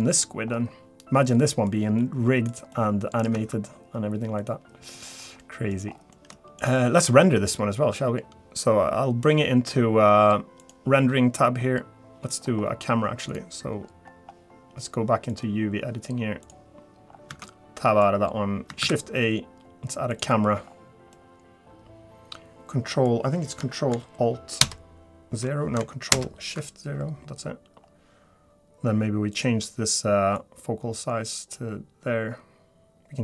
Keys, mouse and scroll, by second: 0.7 ctrl+z, 1.3 middle click, 1.3-1.6 scroll down 10, 1.9 scroll down 1, 2.0 middle click, 2.7 middle click, 3.9 Tab, 4.4 middle click, 5.0-5.4 scroll down 3, 5.4-6.0 scroll up 5, 5.4 middle click, 6.0 shift+middle click, 6.0 scroll down 1, 6.1 middle click, 6.6 middle click, 16.2 click, 16.2 scroll down 1, 16.4 click, 17.1-17.7 scroll down 2, 17.7 Tab, 17.8 middle click, 18.1-18.5 scroll up 2, 18.8 shift+a, 20.7 scroll down 1, 21.1 middle click, 24.6 alt+shift+KP_0, 26.1 ctrl+alt+KP_0, 27.3-27.6 scroll down 1, 27.8-28.6 scroll up 1, 30.5 click.